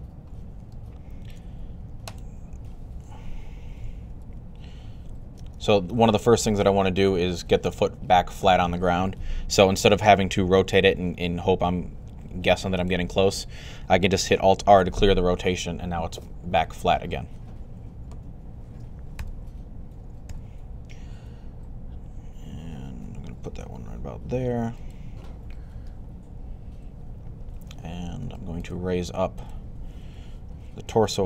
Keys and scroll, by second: 3.9 alt+r, 5.3 super+z, 10.4 r, 14.6 alt+r, 19.0 g, 20.1 y.